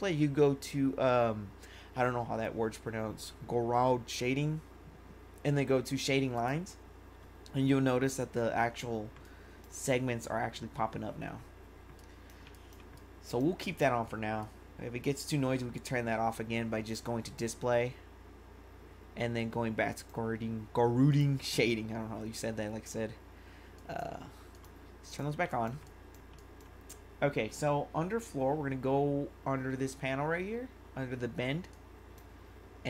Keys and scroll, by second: 12.5 1, 25.4 1.